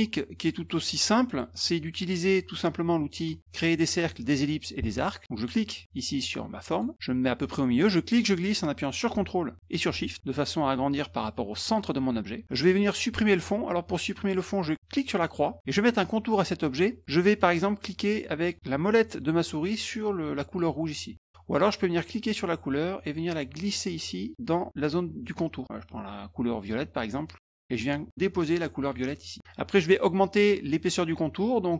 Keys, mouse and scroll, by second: 0.7 middle click, 1.3 middle click, 1.6 middle click, 6.6 click, 7.9-12.4 drag, 15.2 click, 22.1-25.3 drag, 26.9-28.8 drag.